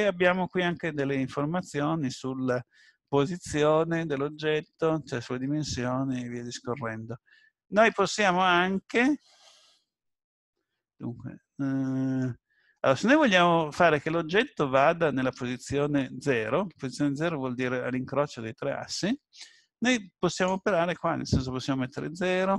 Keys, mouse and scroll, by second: 7.8-8.5 scroll down 3, 8.5 middle click, 13.6-14.1 scroll down 1, 14.1 middle click, 20.3 click.